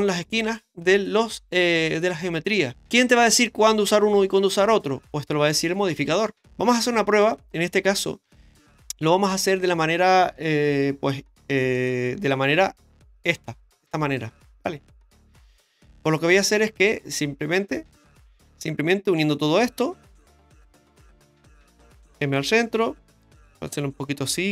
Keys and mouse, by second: 6.5 middle click, 8.2 Tab, 11.8 click, 14.2-15.2 drag, 18.2 ctrl+z, 18.2 m, 19.2 right click, 19.6 shift+right click, 20.1 shift+right click, 20.5 shift+right click, 21.1 shift+right click, 22.2 m, 23.4 KP_7.